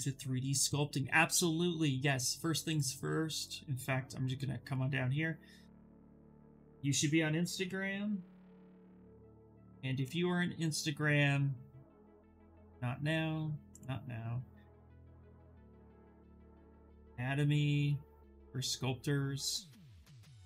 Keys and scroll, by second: 6.8-8.5 typing, 15.3-17.4 typing.